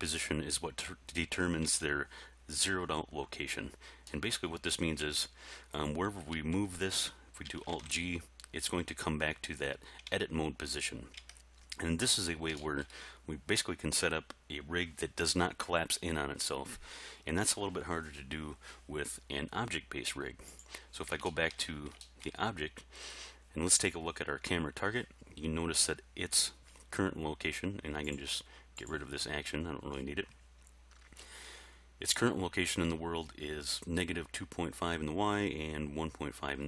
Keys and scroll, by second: 1.6 Tab, 5.0 g, 6.3 g, 7.7 alt+g, 10.1 Tab.